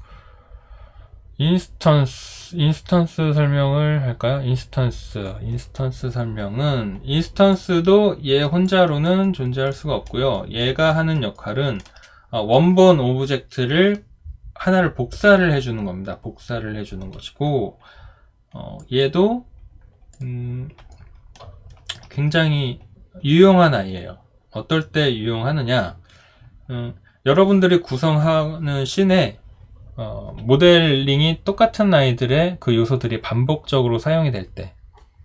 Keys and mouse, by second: 8.6 alt+click, 9.2 alt+right click, 9.7 alt+middle click, 10.3 alt+right click, 10.9 alt+middle click, 11.3 alt+right click, 20.9 alt+right click.